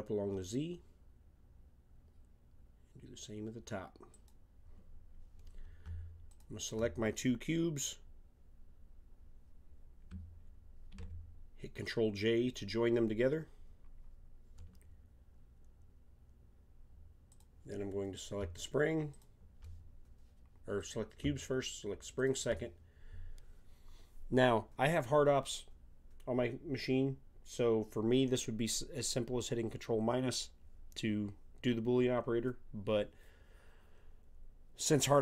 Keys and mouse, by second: 6.3-8.1 drag, 10.9 ctrl+j, 17.3-24.0 drag.